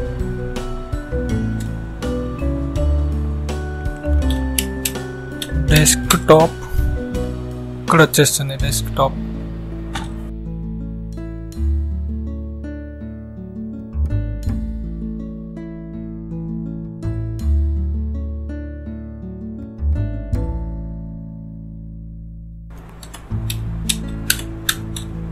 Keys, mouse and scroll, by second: 1.0 Return, 3.5-6.3 typing, 15.2 Return, 21.7-25.3 typing.